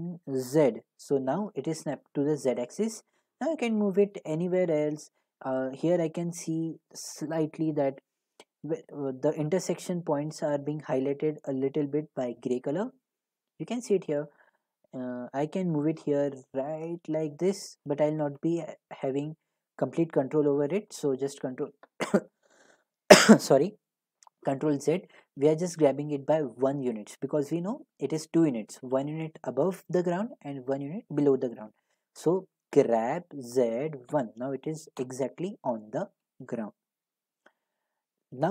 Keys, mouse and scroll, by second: 0.4 z, 17.8 click, 20.9 middle click, 21.2 ctrl+z, 32.7-34.2 typing, 35.0 Return, 36.4-37.6 typing.